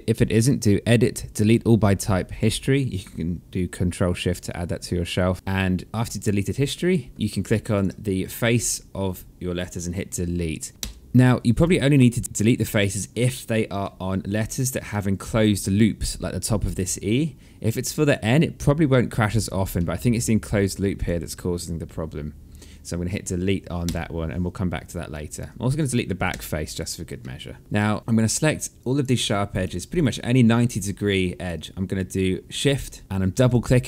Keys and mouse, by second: 0.3 click, 7.1 alt+click, 10.7 Delete, 12.5 alt+middle click, 14.2 ctrl+z, 14.6 alt+middle click, 14.9 alt+click, 16.5 alt+middle click, 17.7 click, 18.2 alt+click, 19.4 alt+middle click, 20.3 click, 23.5 Delete, 24.8 alt+click, 26.0 Delete, 26.9 alt+middle click, 27.6 alt+click, 28.0 alt+middle click, 28.3 alt+click, 28.7 right click, 29.4 click, 29.9 alt+click, 33.0 shift+click.